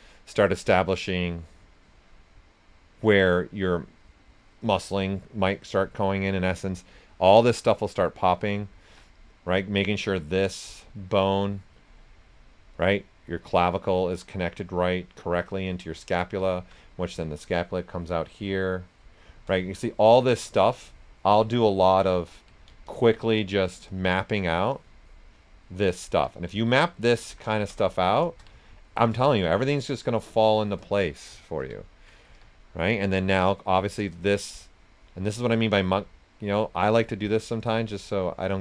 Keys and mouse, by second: 0.5 click, 6.0 right click, 7.8 click, 8.8 s, 8.9-12.0 drag, 12.0 right click, 12.6-14.9 drag, 14.9 right click, 15.4 click, 16.4 alt+right click, 17.4-19.6 drag, 19.6 shift+click, 20.4 s, 20.5 click, 21.1 alt+click, 22.5 alt+right click, 22.8 alt+click, 24.1 alt+right click, 24.7 alt+click, 26.3 alt+right click, 26.7 alt+click, 27.6 shift+d, 27.9 right click, 28.8 alt+click, 31.2 right click, 32.2 s, 32.3 click, 32.9 right click, 34.1-38.6 shift+drag.